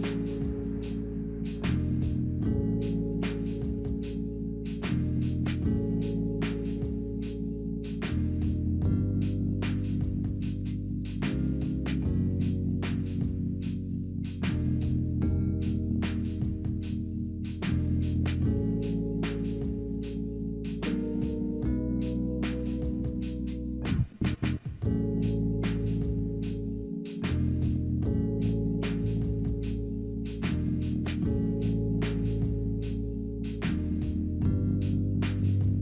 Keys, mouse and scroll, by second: 2.4 scroll up 2, 3.0-3.6 scroll down 1, 3.6-4.2 scroll down 1, 4.2 scroll up 2, 4.6-6.4 scroll down 4, 7.0 double click, 13.6-14.0 scroll up 3, 14.1 scroll down 3, 15.5 scroll down 1, 15.9 scroll up 1, 16.2-16.5 scroll down 2, 18.6 double click, 18.9-19.8 typing, 21.6-22.6 typing, 24.7-25.5 typing, 28.9 scroll up 2, 29.5-29.9 scroll up 1, 29.9 scroll down 4, 30.5 scroll up 4, 31.0 scroll down 4.